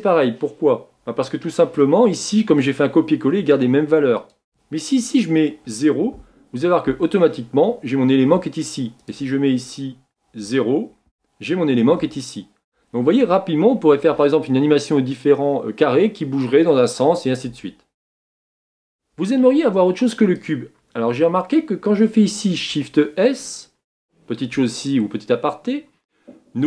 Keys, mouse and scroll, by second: 12.8 scroll down 3, 13.6-14.2 scroll up 2, 19.3 scroll down 2, 21.6 scroll down 1.